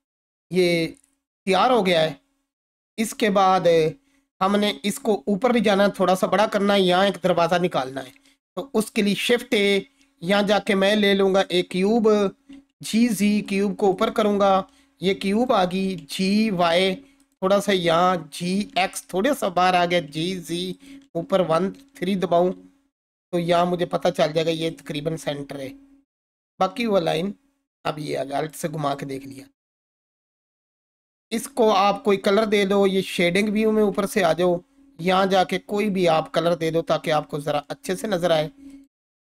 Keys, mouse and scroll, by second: 4.7 click, 6.8-8.1 scroll down 1, 9.0 shift+a, 11.4 click, 12.3-13.2 typing, 13.4 click, 14.2-15.5 alt+drag, 16.0 g, 16.4 y, 17.2 click, 18.1 g, 18.5 x, 19.4 click, 19.7-23.1 typing, 20.7 click, 22.6-23.1 scroll up 1, 24.7 click, 25.2-28.6 alt+drag, 33.4 click.